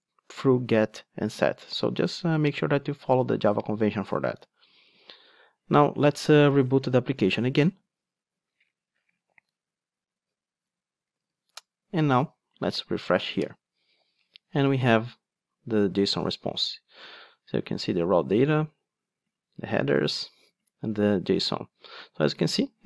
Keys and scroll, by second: 7.3 super+r.